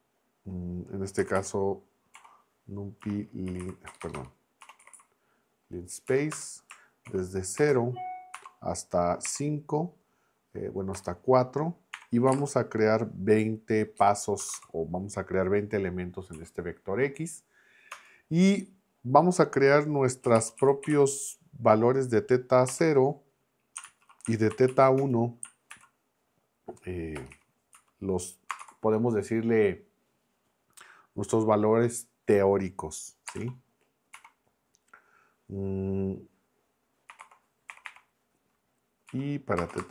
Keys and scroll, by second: 0.9-2.1 typing, 3.2-5.4 typing, 6.1 Down, 6.3 Return, 7.1 shift+9, 7.6 0, 8.4 ,, 9.3 5, 10.9 BackSpace, 11.9 4, 12.3 ', 14.0-15.0 typing, 16.3 Right, 17.9 Return, 20.0-21.4 typing, 22.7 0, 23.8 shift+super+Left, 24.5 super+c, 24.7 Right, 25.0 Return, 25.7 super+v, 27.2 BackSpace, 27.3 1, 27.7 Up, 28.5 space, 28.6 =, 33.3 space, 33.4 3, 34.1 shift+;, 36.9-38.3 typing, 39.1 Down, 39.6 space, 39.7 =, 39.8 space.